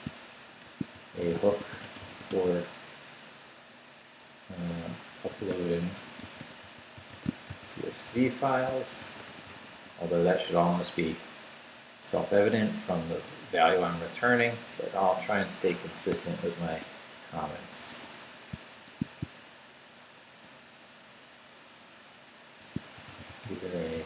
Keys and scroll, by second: 0.6-2.7 typing, 5.0-10.2 typing, 12.2 Up, 12.8 Left, 13.3 Down, 14.2 Left, 15.7 Escape, 16.1 o, 16.7 Tab, 17.9 shift+3, 22.3-24.0 typing.